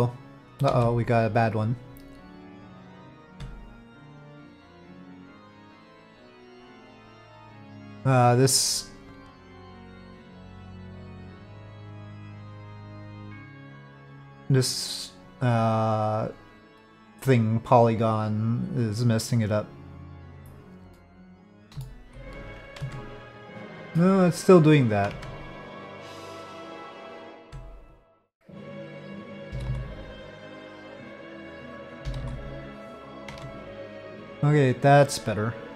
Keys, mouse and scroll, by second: 0.7 ctrl+z, 3.2 Tab, 5.1 click, 6.3-7.6 drag, 13.0 click, 21.1 middle click, 21.9 shift+middle click, 22.1 shift+click, 22.3 j, 22.8 Tab, 23.6 click, 25.1 Tab, 26.1 Tab, 27.4 Tab, 27.9 click, 29.5 g, 32.0 g, 33.4 Tab.